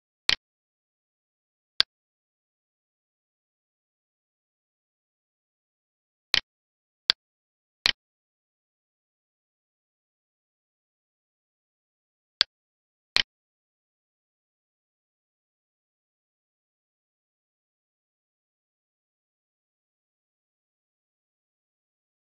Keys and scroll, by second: 14.3 alt+e.